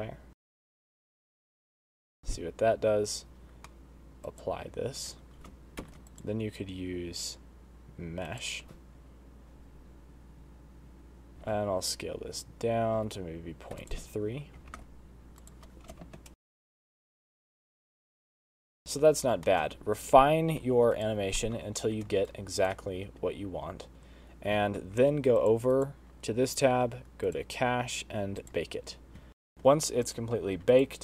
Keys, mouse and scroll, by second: 0.3 click, 0.5 click, 0.7 click, 1.0 click, 1.3 click, 1.5 click, 1.6 click, 1.8 click, 2.0 space, 2.1 shift+Right, 2.3 shift+Right, 4.1 middle click, 4.3 click, 4.3 BackSpace, 5.9 middle click, 6.6 click, 9.4 shift+Right, 11.5 space, 11.6 middle click, 11.9 s, 15.3 ctrl+a, 16.5 space, 17.0 shift+Right, 19.4 space, 19.5 middle click, 20.0 shift+middle click, 20.5-21.5 scroll up 2, 21.5 click, 21.9 middle click, 22.8 shift+right click, 23.4 space, 25.2 space, 25.9 click, 26.3 click, 26.9-27.8 scroll down 8, 27.8 click, 29.0 click, 29.8 middle click, 30.6 click.